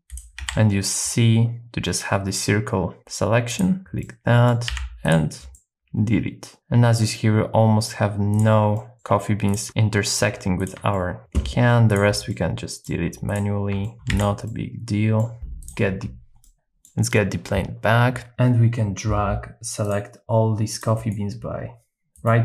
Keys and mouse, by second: 0.0 n, 0.4 c, 4.0-5.1 middle drag, 4.7 x, 5.6-7.9 middle drag, 8.7 middle click, 9.7 middle click, 10.9 middle click, 12.3 middle click, 13.8 middle click, 13.9 shift+x, 14.4 middle click, 15.6 click, 16.4 middle click, 20.7 click, 20.9 right click, 22.1-22.4 right drag.